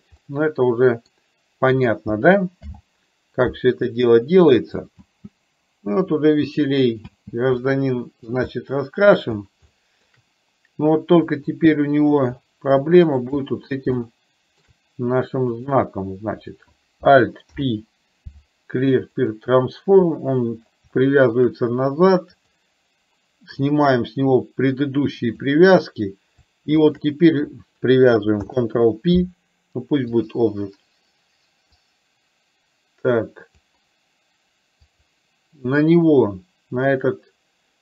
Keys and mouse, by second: 0.2-1.1 middle drag, 2.7 alt+h, 4.2 middle click, 5.1 space, 7.7 middle click, 8.6-9.1 shift+middle drag, 9.8 shift+middle drag, 11.3 click, 12.8 shift+middle click, 14.0 shift+middle click, 15.7 click, 17.6 alt+p, 21.1 shift+middle click, 22.3 click, 23.7-25.6 drag, 27.0 shift+click, 28.5 ctrl+p, 31.8-33.8 drag, 35.0 click.